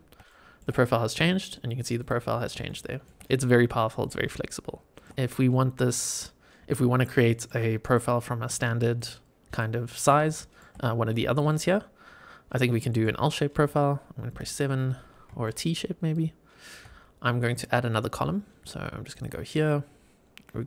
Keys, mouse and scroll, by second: 0.2-0.5 shift+middle drag, 1.1-1.4 middle drag, 1.9 click, 2.2 scroll up 2, 2.6-3.0 shift+middle drag, 4.3-4.9 scroll down 4, 4.9 middle click, 5.1 click, 5.4 scroll down 1, 5.8 middle click, 7.2 middle click, 7.8 click, 8.4 drag, 8.9 drag, 9.4 click, 9.8 middle click, 10.3 shift+middle drag, 11.2-12.4 drag, 12.6 middle drag, 14.2 KP_7, 15.0 scroll up 2, 15.4-15.7 shift+middle drag, 16.0 shift+right click, 19.0-20.6 drag.